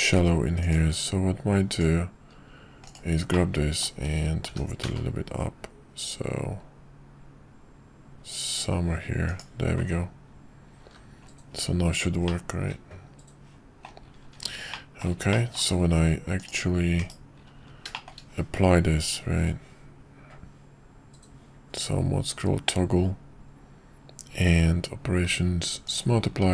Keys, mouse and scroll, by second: 0.6 click, 0.9 q, 3.3 middle click, 4.6 g, 10.8 h, 12.3-13.8 middle drag, 14.7 middle click, 15.3 shift+middle drag, 16.4 click, 16.9 /, 17.9 shift+middle drag, 19.0 q.